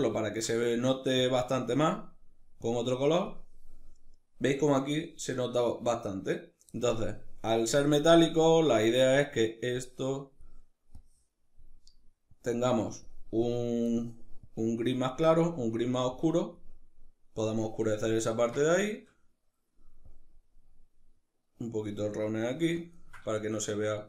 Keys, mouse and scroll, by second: 0.8 click, 8.2-8.8 middle drag, 8.8 click, 9.4 drag, 10.6 drag, 12.0 click, 13.1 click, 17.9-19.7 ctrl+middle drag, 19.7-22.6 drag, 22.6-24.0 ctrl+middle drag.